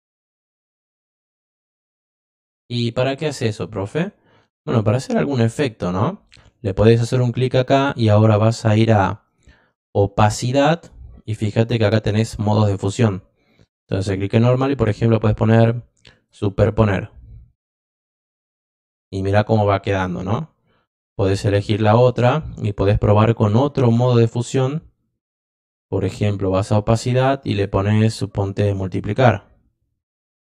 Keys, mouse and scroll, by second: 4.7 click, 10.7 click, 13.4 click, 16.1 click, 21.0 click, 21.7 click, 26.5 click, 27.5 click.